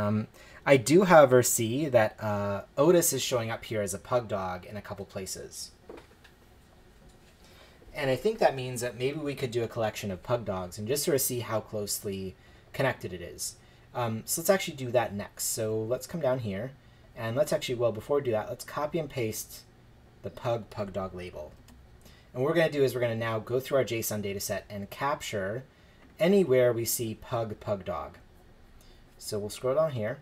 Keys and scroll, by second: 21.8 super+c.